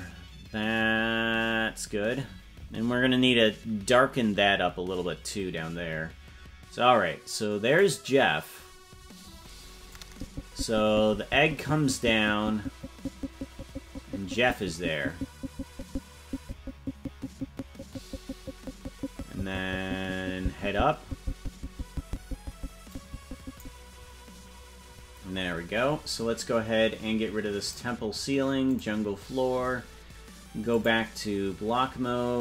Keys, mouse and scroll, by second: 8.0 right click, 10.2-23.9 drag, 27.8 click, 29.1 click, 30.7 click.